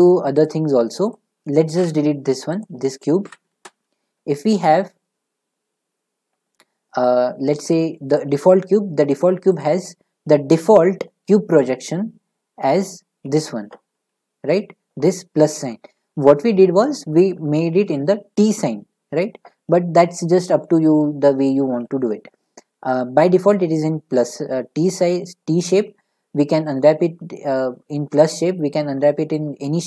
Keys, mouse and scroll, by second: 1.1 click, 1.7 Delete, 2.6 click, 3.2 Delete, 3.5 a, 8.1 click, 9.6 click, 13.9 a.